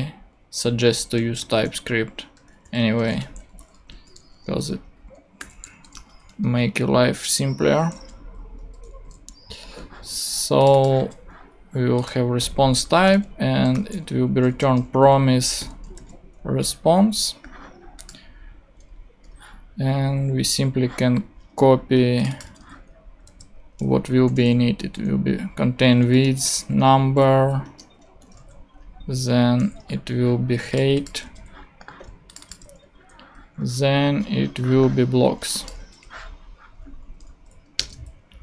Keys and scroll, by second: 0.1 space, 1.4-4.3 typing, 5.4 =, 5.5 space, 5.9 shift+[, 6.3 shift+Return, 7.0 Return, 7.6 Down, 8.6 BackSpace, 9.0 ;, 12.0 super+c, 12.9 shift+;, 13.0 shift+space, 13.7 shift+p, 14.6 shift+Return, 15.0 shift+Return, 15.6 shift+,, 15.9 shift+super+v, 16.7 super+v, 19.3 super+Tab, 22.6 super+Tab, 23.2 super+v, 23.9 shift+super+v, 24.2 shift+super+;, 24.3 shift+space, 26.0 n, 27.3 Down, 27.6 Return, 28.2 ;, 28.3 super+d, 29.2 ctrl+super+d, 29.8 ctrl+super+Tab, 30.5 super+Tab, 31.2 super+c, 31.3 super+Tab, 32.9 super+Tab, 35.9 super+Tab, 37.2 super+Right, 37.7 super+Return, 37.9 super+v.